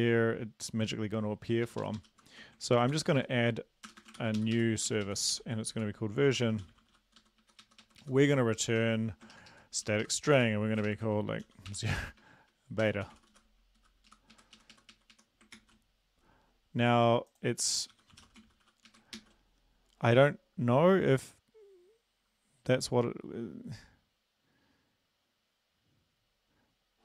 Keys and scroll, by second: 1.7 shift+Up, 1.8 shift+Up, 2.0 shift+Up, 2.1 shift+Left, 2.9 ctrl+c, 3.2 Right, 3.9 Return, 4.0 Return, 4.2 ctrl+v, 4.4 Up, 4.5 Up, 4.9 ctrl+Right, 5.0 ctrl+Right, 5.4 ctrl+Right, 5.8 ctrl+shift+Left, 6.3-6.9 typing, 7.2 Right, 7.4 Right, 7.6 Right, 8.3 Right, 8.3 Down, 8.6 Left, 9.3 ctrl+shift+Left, 9.5 ctrl+shift+Left, 9.8 ctrl+shift+Left, 10.3 ctrl+shift+Left, 10.3 ctrl+shift+Right, 10.9 ctrl+shift+Left, 11.5 typing, 12.8 typing, 13.3 Down, 13.3 Right, 14.1 Left, 14.4 Up, 14.6 Right, 14.7 Right, 14.9 Right, 15.1 Right, 15.5 ctrl+s, 17.9-18.6 typing, 18.9 Right, 19.2 ctrl+s.